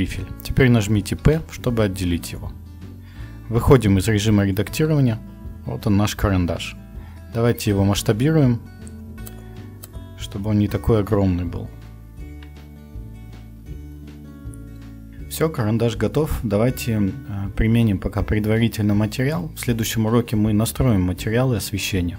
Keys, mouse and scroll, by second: 1.2 p, 3.5 Tab, 8.0 s, 9.9-11.5 drag, 12.3 KP_Decimal, 13.3-14.2 middle drag, 15.5 middle click, 16.3-16.7 middle drag, 17.1-19.0 middle drag.